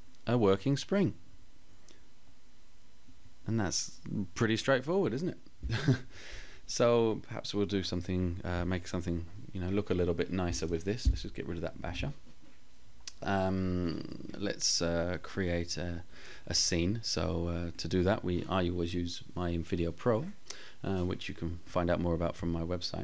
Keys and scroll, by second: 10.2 Delete.